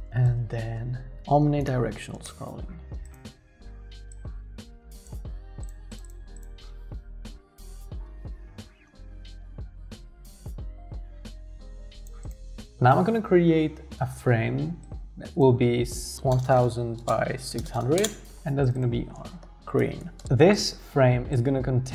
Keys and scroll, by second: 0.0-0.5 typing, 6.9 Return, 6.9-8.2 typing, 15.9-17.9 typing, 18.0 Return, 18.9-20.5 typing.